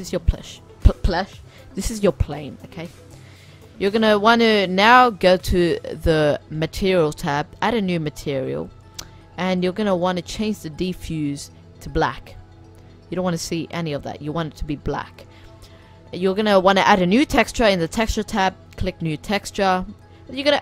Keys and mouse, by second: 0.9-4.3 middle drag, 5.0-12.5 drag, 12.6 middle click, 13.8-17.0 drag, 18.4-19.2 drag, 19.2-20.2 middle drag, 20.2-20.6 drag.